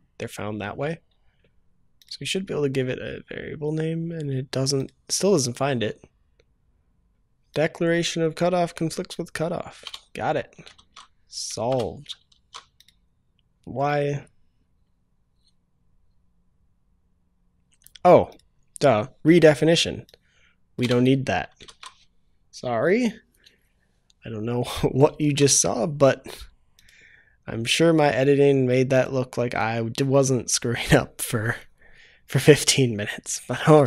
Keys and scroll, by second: 7.1 ctrl+s, 10.7 ctrl+s, 12.2 ctrl+s, 21.6 ctrl+s, 25.1 ctrl+s.